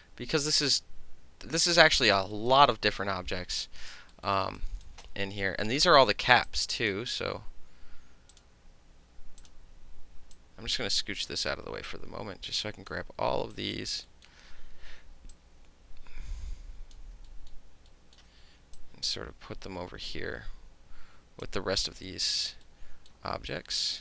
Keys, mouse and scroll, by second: 0.0 w, 0.7-1.7 right drag, 2.0 alt+click, 2.4 alt+middle click, 2.5-4.1 alt+drag, 4.3 alt+middle click, 4.4 alt+right click, 4.6 alt+middle click, 4.9 alt+right click, 5.0 alt+middle click, 5.6-6.5 alt+middle drag, 6.5 alt+click, 6.9-8.3 middle drag, 8.3 click, 8.4-10.4 middle drag, 9.4 click, 10.4-11.4 drag, 11.4-11.9 middle drag, 11.9-12.9 drag, 12.9-13.5 middle drag, 13.5 alt+right click, 13.8 alt+middle click, 14.3 alt+middle click, 15.3-17.0 drag, 17.3 alt+middle click, 17.9 alt+middle click, 18.3-18.8 middle drag, 18.8-21.4 drag, 21.4 alt+middle click, 22.1 alt+middle click, 23.1 alt+middle click, 23.5 alt+right click, 23.7 alt+middle click.